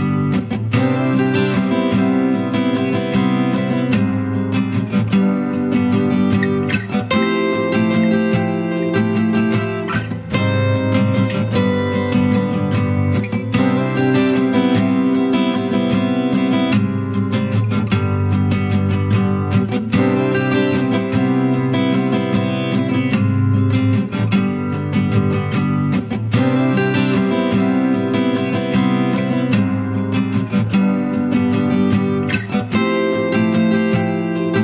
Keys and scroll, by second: 18.1 ], 18.4 ], 18.5 ], 18.7 ].